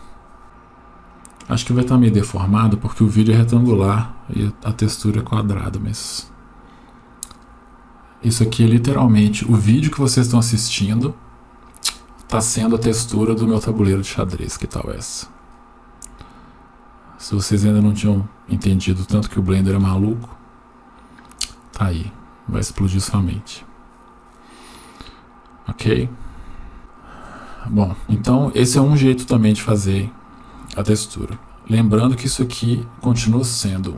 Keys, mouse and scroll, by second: 1.8-2.8 middle drag, 13.8-15.3 middle drag, 21.0 click, 29.8-30.5 scroll down 1, 32.5 Tab, 33.2 Tab.